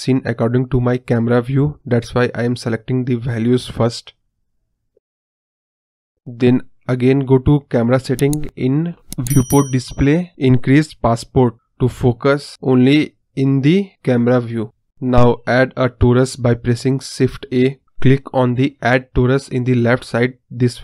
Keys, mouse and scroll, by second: 0.7-2.3 drag, 3.1-4.7 drag, 8.2 click, 8.4 scroll down 7, 9.5 click, 9.7-10.3 scroll down 7, 10.3-11.8 drag, 14.4 shift+a, 17.0-18.5 drag.